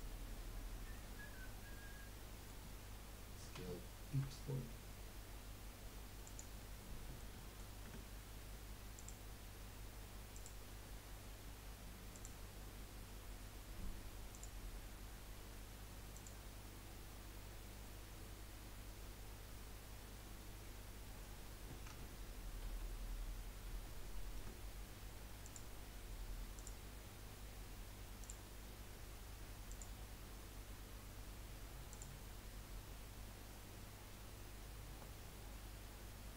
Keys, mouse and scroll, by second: 0.9-4.1 middle drag, 4.1 s, 6.7-7.9 middle drag, 7.9 Tab, 8.3 scroll down 1, 10.6 scroll down 1, 12.1 click, 14.3-20.0 drag, 22.8 ctrl+z, 23.7 ctrl+z, 25.4-31.2 drag, 34.4-36.3 drag.